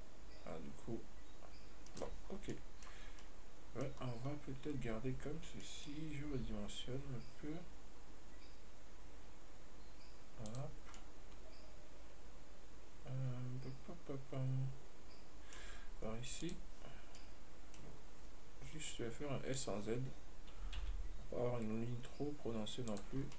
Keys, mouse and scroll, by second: 2.6 scroll down 2, 2.8-3.3 middle drag, 3.3 scroll down 1, 3.5-4.2 middle drag, 4.2-5.9 scroll up 2, 5.9-6.6 middle drag, 6.6 s.